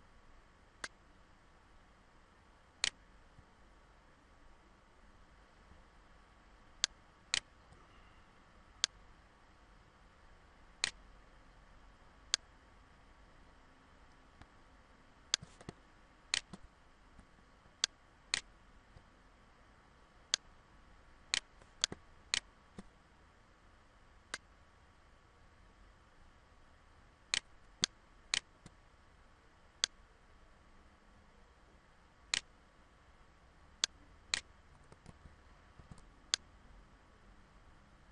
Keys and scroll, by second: 34.6 ctrl+z, 36.6 ctrl+z.